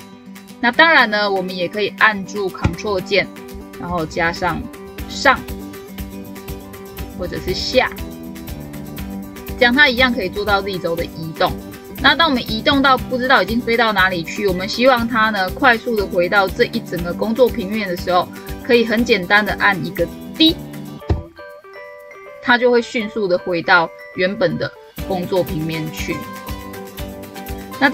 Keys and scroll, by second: 3.7 ctrl+Up, 7.0 ctrl+Down, 10.5 ctrl+Up.